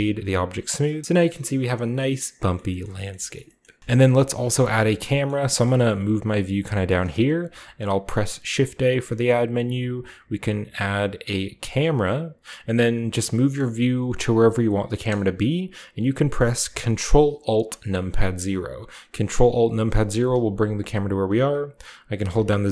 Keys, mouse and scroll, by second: 4.0 shift+middle click, 4.7 shift+middle click, 5.0 shift+middle click, 5.2 shift+middle drag, 5.5-7.5 shift+scroll up 3, 5.7 shift+middle click, 5.9 shift+middle click, 8.5 shift+a, 11.8 click, 13.3 shift+middle click, 19.6 ctrl+alt+KP_0, 22.3-22.7 z.